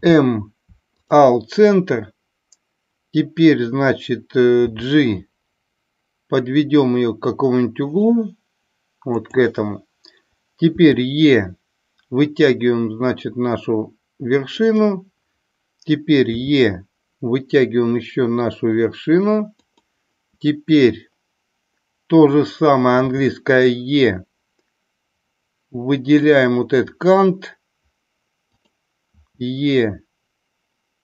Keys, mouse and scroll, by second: 9.1 click, 14.6 click, 19.6 click, 28.5 click.